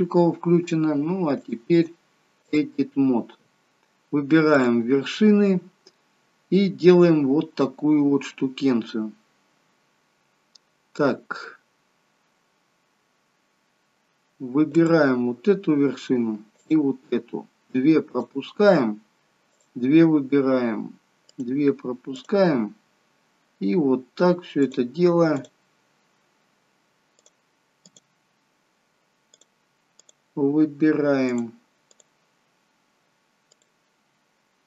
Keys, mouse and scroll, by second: 1.5 click, 4.7 click, 5.2 scroll up 2, 14.8 click, 16.5 shift+scroll up 1, 16.7 shift+click, 18.2 shift+click, 19.6 shift+click, 21.4 shift+click, 22.2 shift+click, 24.9 shift+click, 25.5 shift+click, 27.3 shift+click, 27.9 shift+click, 29.5 shift+click, 30.1 shift+click, 31.5 shift+click, 32.0 shift+click, 33.5 shift+click.